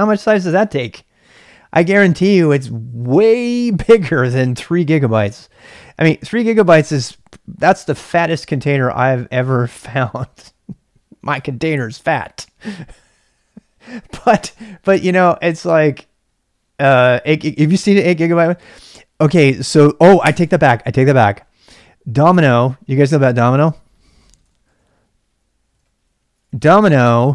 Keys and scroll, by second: 24.2-26.5 typing.